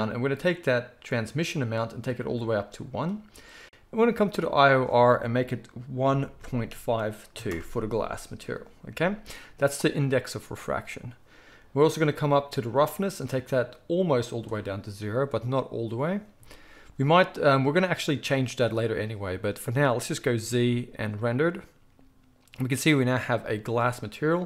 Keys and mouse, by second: 20.3 z.